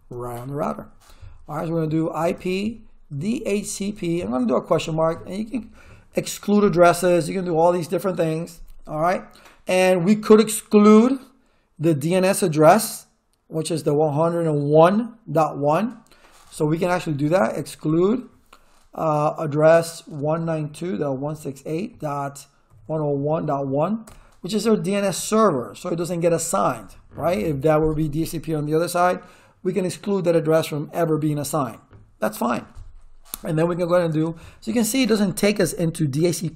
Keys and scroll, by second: 0.0-0.3 typing, 1.9-4.7 typing, 17.1-18.0 typing, 19.9-24.1 typing, 33.6-34.5 typing.